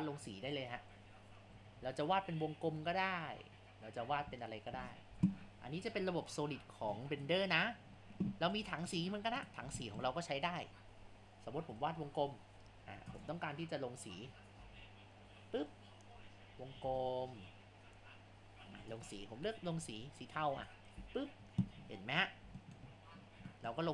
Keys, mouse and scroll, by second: 21.9 scroll.